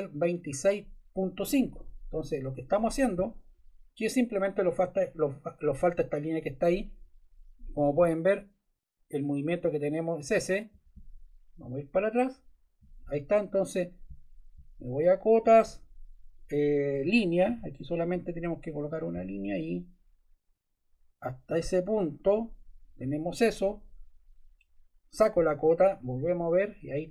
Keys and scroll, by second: 7.9 BackSpace, 9.1 Left, 10.4 Left, 10.9 Right, 12.1 Right, 17.4 l, 23.0 Escape.